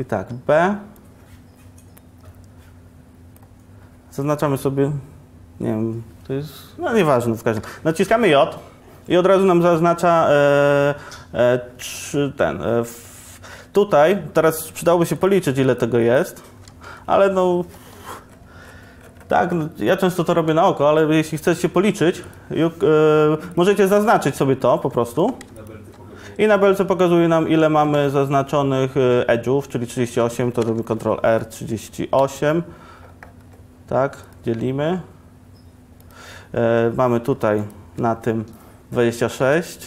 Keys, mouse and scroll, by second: 0.9 b, 3.5 b, 15.2-16.9 middle drag, 16.9 a, 18.1 ctrl+r, 22.3-23.9 middle drag, 25.3 2, 27.9 1, 30.9 ctrl+r.